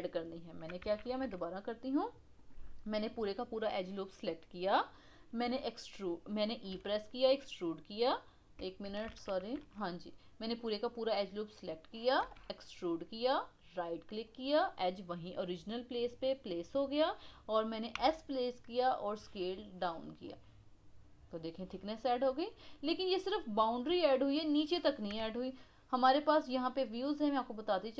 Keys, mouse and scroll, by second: 0.8 ctrl+z, 1.1 ctrl+z, 2.3 click, 3.0 click, 3.2 click, 5.4 e, 6.7 e, 9.1 ctrl+z, 9.5 ctrl+z, 10.4 click, 10.5 click, 12.2 e, 20.2-25.2 middle drag, 25.2 KP_1, 27.3-27.9 middle drag.